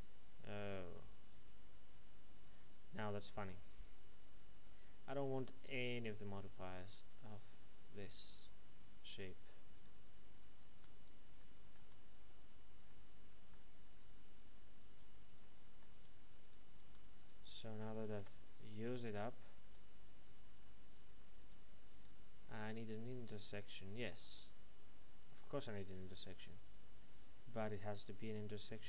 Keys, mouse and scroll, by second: 0.8 middle click, 6.4 click, 9.7 right click, 10.7 Tab, 11.4 middle click, 11.8 Tab, 12.2-12.8 scroll down 1, 12.8 middle click, 13.8 Tab, 14.3-14.8 scroll up 1, 14.8 Tab, 15.4 middle click, 15.9 Tab, 16.4 right click, 16.8 Tab, 17.2 right click, 18.1 h, 19.0 right click, 19.6 Tab, 21.4 right click, 22.6 click, 24.2 Tab, 28.5 click.